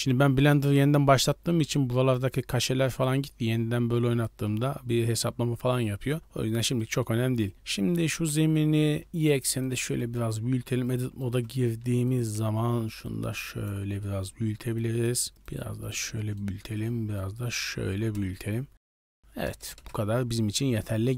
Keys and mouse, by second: 3.1-4.4 drag, 6.7 middle drag, 8.1 s, 9.9 middle drag, 10.1 Tab, 10.4 2, 10.8 right click, 11.1 shift+middle click, 11.5 t, 12.0 click, 12.3 t, 13.0 click, 13.9 middle click, 14.7 click, 15.4 click, 16.1 middle click, 16.6 right click, 17.1 click, 18.9 right click, 19.0 click, 19.7 KP_0, 20.2 Tab.